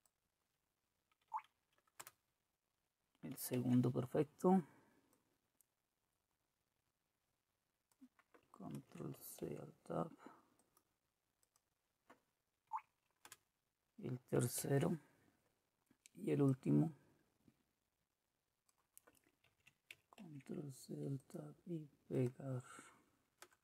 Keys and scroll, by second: 3.6 Right, 3.6 Left, 8.7 ctrl+c, 9.4 alt+Tab, 12.6 Right, 13.2 Return, 14.6 alt+Tab, 19.5 ctrl+c, 23.4 Return.